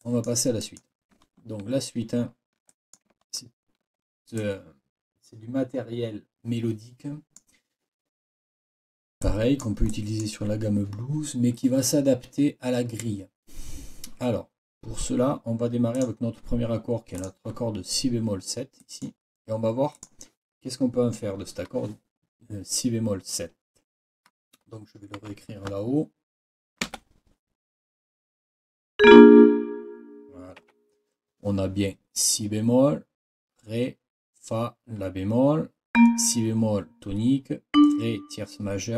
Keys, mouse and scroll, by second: 0.0 click, 0.2 scroll, 0.3 click, 0.6-1.5 scroll up 4, 2.2 ctrl+scroll up 1, 2.7 ctrl+click, 3.4 ctrl+scroll down 2, 4.4 ctrl+click, 5.4 click, 5.8-7.6 drag, 9.5 click, 9.9 click, 9.9-10.4 scroll down 1, 16.0 scroll down 1, 17.2 scroll down 1, 18.8-19.2 scroll up 1, 20.0 click, 25.2 n, 26.8 KP_7, 30.6 Escape, 35.9 click, 37.7 click.